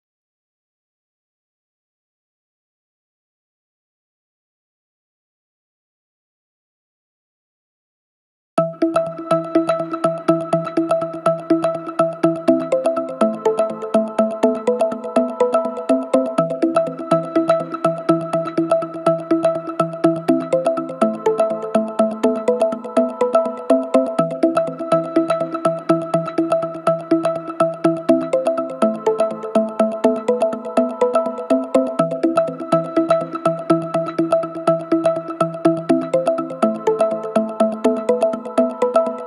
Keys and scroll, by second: 22.0 3, 25.6 ctrl+d, 26.0 Escape, 27.0 Escape, 29.7 Escape, 38.8 Delete.